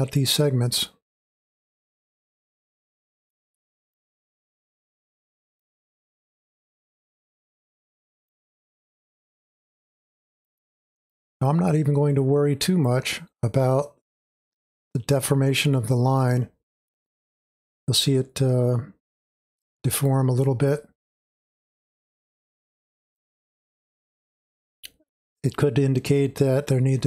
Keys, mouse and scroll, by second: 6.6-12.6 drag, 14.5-20.5 drag, 21.1-27.0 drag.